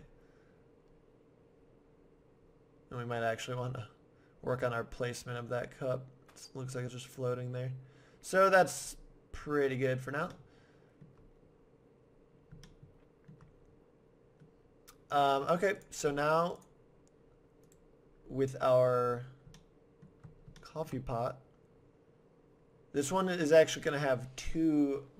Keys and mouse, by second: 0.3 middle click, 8.7 middle click, 9.1 middle click, 9.2 middle click, 10.2 middle click, 13.3-15.8 middle drag, 15.8-17.4 drag, 17.6-19.4 right drag, 19.4-20.7 middle drag.